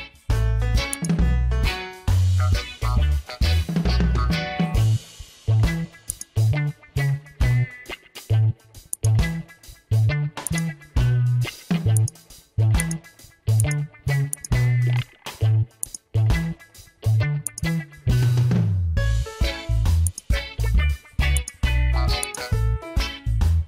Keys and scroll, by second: 19.9 space.